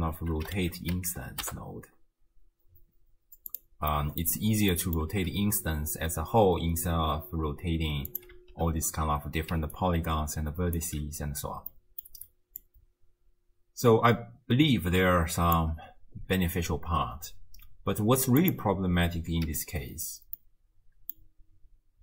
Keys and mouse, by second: 3.9 middle click, 4.8 middle click, 8.1 click, 8.4 m, 9.5 d, 9.8-11.4 drag, 10.8 d, 11.4 d, 11.7 click, 11.7 right click, 12.6-15.6 drag, 19.5 m, 20.4 middle click.